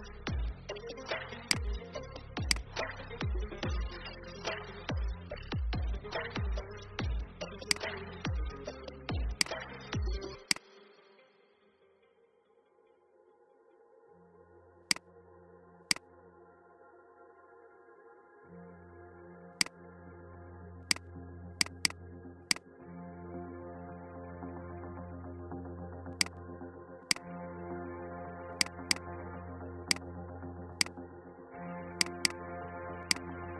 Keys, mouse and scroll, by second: 6.3-6.6 alt+scroll up 1, 7.6-11.5 drag, 12.9 shift+scroll, 14.8 click, 17.5 ctrl+x, 19.4 click, 23.1 ctrl+f, 26.1-31.7 drag.